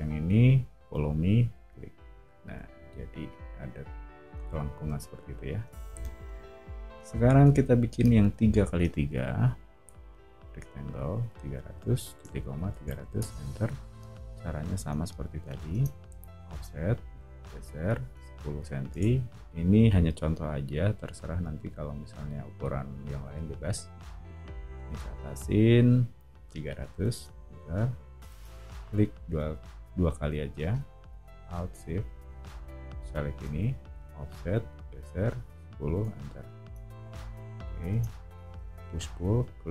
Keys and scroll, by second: 2.6 o, 9.1 r, 11.0-13.3 typing, 14.7 o, 15.7 space, 16.4 f, 17.9-19.7 typing, 18.9 Return, 26.2-27.2 typing, 28.3 space, 33.9 f, 35.2-38.6 typing.